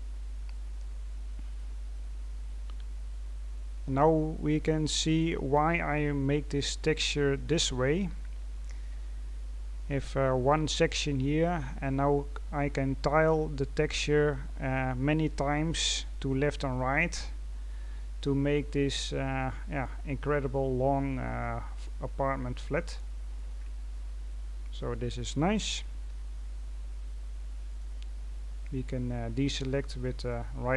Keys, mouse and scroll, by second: 0.9-4.7 scroll down 8, 4.7 right click, 5.3-6.6 scroll up 10, 6.6 scroll down 2, 7.2-10.2 scroll up 1, 12.6-14.3 scroll down 9, 14.3-15.2 scroll down 2, 16.0-16.6 scroll up 1, 16.6-17.1 scroll up 9, 17.3-17.6 scroll down 4, 18.0-19.2 scroll down 6, 19.2 middle click, 20.1-20.9 scroll up 4, 20.9-21.3 scroll down 2, 21.3 middle click, 22.0-22.7 scroll up 2, 22.7-23.5 scroll down 3, 23.5-24.1 scroll up 2, 24.1-26.0 scroll down 1, 26.0 a, 27.6 right click, 28.9-30.1 scroll down 2, 30.1 right click.